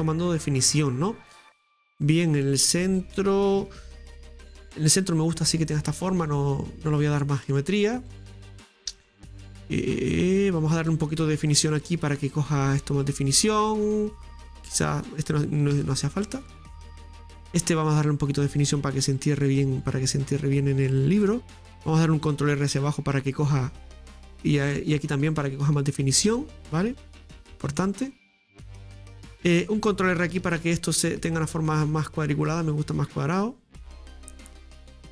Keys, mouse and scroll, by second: 0.1-0.4 scroll down 1, 0.4-4.0 middle drag, 5.8 scroll down 2, 6.1-9.1 middle drag, 10.5-11.6 scroll up 2, 11.6 ctrl+r, 13.6 ctrl+r, 15.8 ctrl+z, 16.3-19.1 middle drag, 19.0 ctrl+r, 23.1 ctrl+r, 24.7 middle click, 25.7 ctrl+r, 27.8-30.4 middle drag, 30.4 ctrl+r, 34.1-35.1 middle drag.